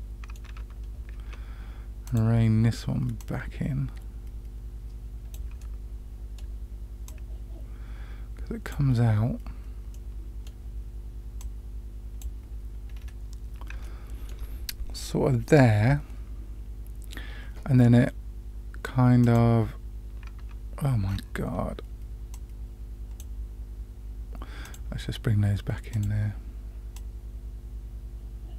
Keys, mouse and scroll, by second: 2.0 click, 3.1-5.3 drag, 5.5-6.3 middle drag, 7.0-8.7 drag, 9.9-10.5 middle drag, 11.3 click, 12.9-13.7 scroll up 2, 13.7 shift+scroll up 1, 13.8-14.3 shift+middle drag, 19.2 click, 21.0-22.2 scroll down 2, 22.3 click, 24.6 click, 25.9 click, 26.9-28.5 drag.